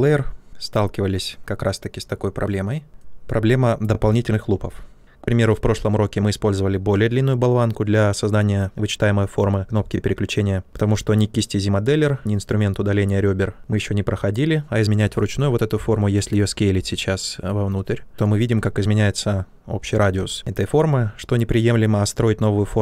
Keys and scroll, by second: 2.9 q, 16.7 r, 18.1 ctrl+shift+z, 20.1 ctrl+z, 21.1-22.3 typing.